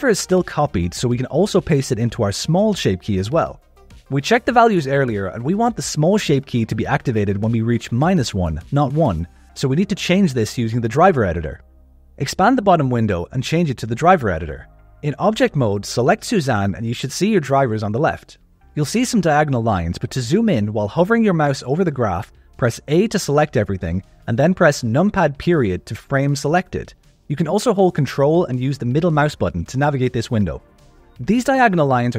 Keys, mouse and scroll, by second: 0.6 click, 2.5 right click, 11.9-13.3 drag, 13.6 shift+middle click, 15.2 click, 20.0 click, 23.2 a, 24.9 KP_Decimal, 27.8-30.1 ctrl+middle drag, 30.9 ctrl+middle click, 30.9 click, 30.9 scroll up 2.